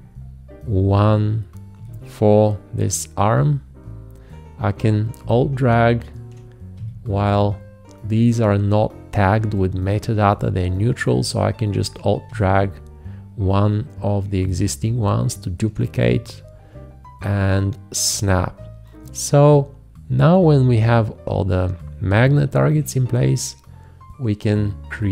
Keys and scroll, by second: 6.7 alt+`, 12.3 alt+`, 16.1 alt+`.